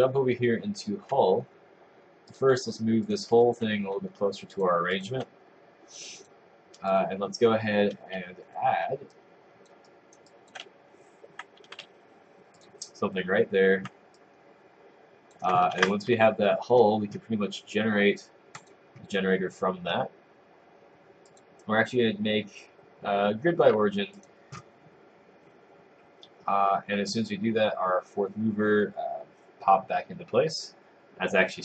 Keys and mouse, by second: 3.2 click, 4.6 click, 6.4 click, 9.2 click, 9.9 right click, 10.3 click, 11.2 s, 11.8 s, 12.6 click, 14.2 alt+s, 14.2 click.